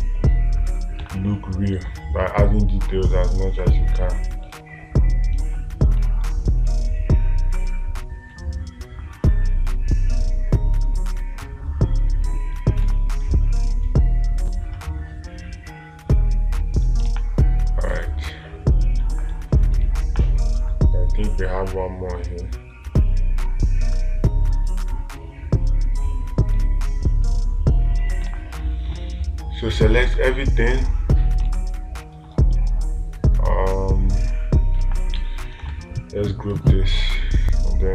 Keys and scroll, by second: 1.5 space, 5.0 space, 20.3 space, 28.7 space, 31.9 space, 35.2 space.